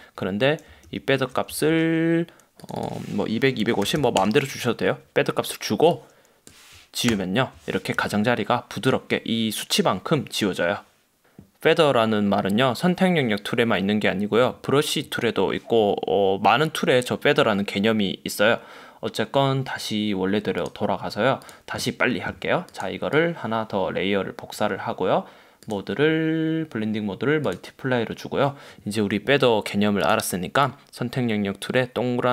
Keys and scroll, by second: 1.0 alt+super+z, 1.6 super+d, 3.5-4.6 typing, 7.2 BackSpace, 9.1 super+d.